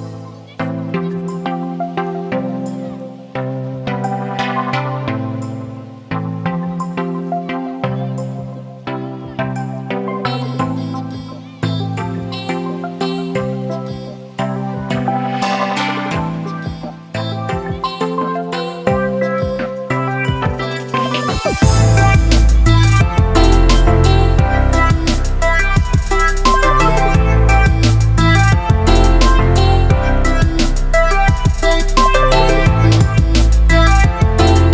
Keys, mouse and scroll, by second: 0.1 click, 0.2 space, 2.2 ctrl+z, 2.3 space, 2.5 click, 2.8 space, 3.0 alt+click, 3.0 alt+click, 6.3 space, 6.4-13.8 drag, 13.8-14.3 typing, 15.3-25.2 drag, 25.7 ctrl+z, 26.3 space, 26.4-34.7 ctrl+drag.